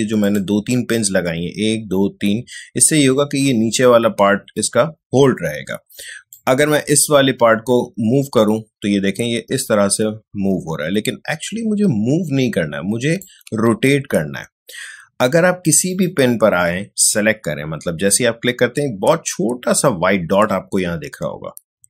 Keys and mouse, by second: 0.2 click, 6.3-13.7 drag, 13.7 ctrl+z, 15.9 click.